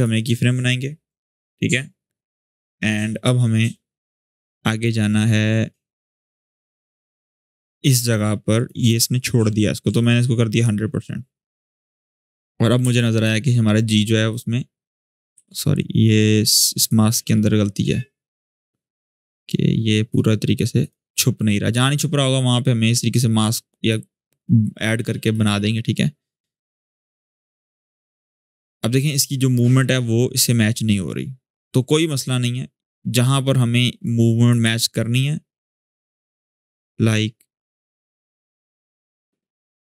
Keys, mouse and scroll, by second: 4.5-8.5 drag, 12.1-12.6 scroll up 1, 12.6 space, 12.7 click, 13.1 space, 14.0 click, 15.3 ctrl+z, 16.2-19.9 drag, 32.9-33.6 scroll down 1, 33.8-34.4 click, 34.5 alt+scroll up 1, 34.9-39.9 drag.